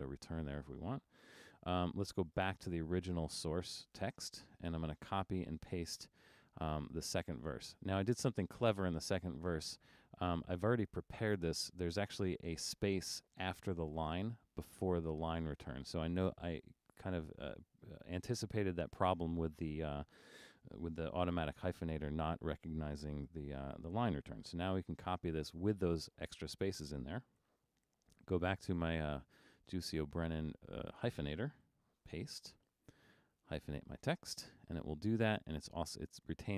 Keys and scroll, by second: 0.0 Return, 13.3 Left, 13.6 Right, 14.9 Right, 25.5 super+c, 32.2 super+v.